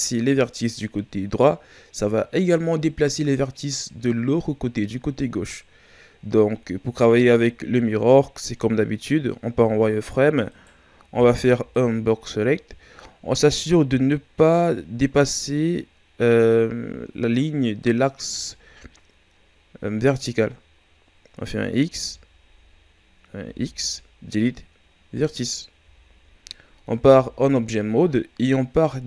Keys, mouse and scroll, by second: 4.9 scroll down 2, 6.2-6.7 scroll down 1, 6.7 shift+scroll up 1, 9.4 z, 10.5 right click, 11.1 b, 21.8 w, 23.4 x, 25.8 z, 26.4-26.9 ctrl+scroll up 2, 26.9 Tab.